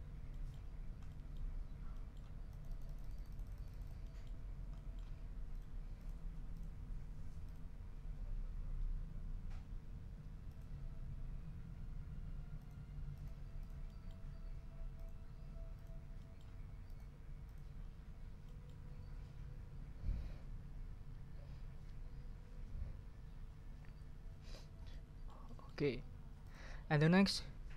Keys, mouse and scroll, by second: 0.3 ctrl+middle click, 0.7 ctrl+scroll down 1, 1.1 ctrl+middle click, 1.9 ctrl+middle click, 2.5-4.4 ctrl+middle drag, 4.7 click, 5.5 click, 6.0 click, 6.5 click, 7.4 click, 10.5 click, 12.6 click, 13.1 click, 13.6 click, 13.8 middle click, 14.9 click, 15.7 click, 16.2 click, 16.8 click, 17.4 click, 18.4 click, 24.9 middle click, 26.4 click.